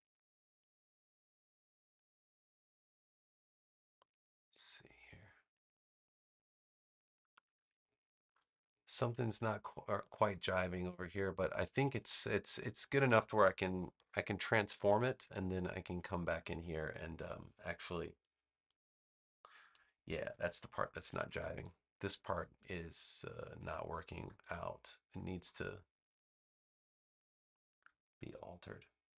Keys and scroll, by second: 13.9 super+Return, 20.8 super+=, 24.1 BackSpace.